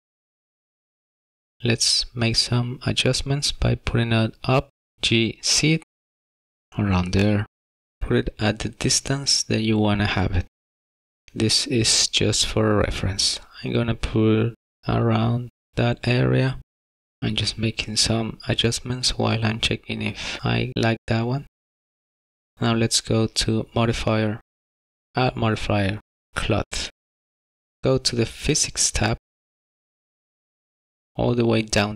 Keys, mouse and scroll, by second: 0.8 shift+middle click, 1.9 middle click, 4.2 z, 6.2 g, 7.3 middle click, 8.3-8.9 scroll up 2, 8.4 middle click, 9.8 g, 11.2 middle click, 12.9 shift+middle click, 16.7 middle click, 17.4 shift+middle click, 23.8 click, 25.5 click, 29.7 click, 30.6-31.9 scroll down 19.